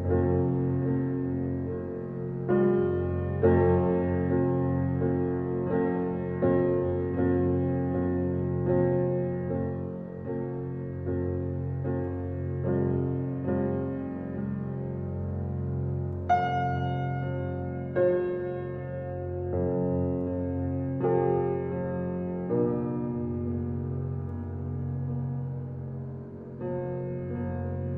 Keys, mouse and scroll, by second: 0.6-2.0 middle drag, 2.0 g, 3.3-4.3 middle drag, 4.3 scroll down 3, 4.5-5.2 middle drag, 5.2-6.4 scroll down 4, 6.4 scroll down 1, 6.6 click, 7.4-8.4 drag, 8.6-10.9 drag, 11.9-13.4 drag, 13.9-16.7 drag, 17.0-17.6 scroll up 3, 18.5-19.0 scroll up 2, 19.0 click, 19.3-20.5 middle drag, 20.5 click, 20.7-21.0 scroll down 5, 21.0 click, 21.5 click, 21.9 scroll down 1, 22.2 click, 23.5 scroll up 4, 24.3 scroll up 1, 24.6-25.2 scroll down 5, 25.2 click, 25.6-26.0 middle drag, 26.0-26.3 scroll up 3, 26.3-27.8 middle drag.